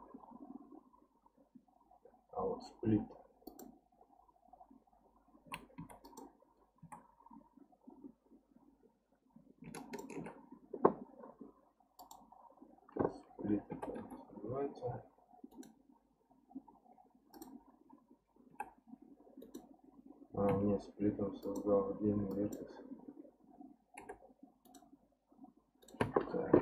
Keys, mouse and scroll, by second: 6.0 click, 6.8 1, 9.7 ctrl+click, 12.0 click, 13.7 g, 17.3 click, 18.5 g, 20.5 x, 22.3 click, 24.0 g, 25.8-26.6 right drag.